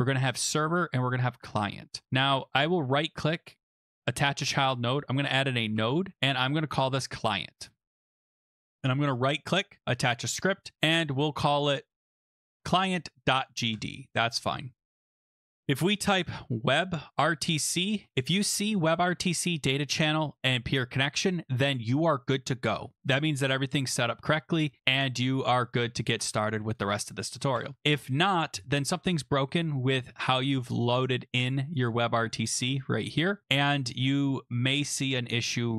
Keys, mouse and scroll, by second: 2.5 right click, 4.1 click, 4.7-5.7 typing, 6.7 click, 6.8 click, 7.7 ctrl+a, 7.7-8.9 typing, 8.8 right click, 9.8 click, 11.2 click, 12.3 click, 13.7 Return, 15.4 click, 15.8 Return, 16.0-18.0 typing, 26.7 click, 27.5 BackSpace, 27.8 BackSpace, 27.9 BackSpace, 31.4 click, 31.8 click, 32.3 click, 33.4 click.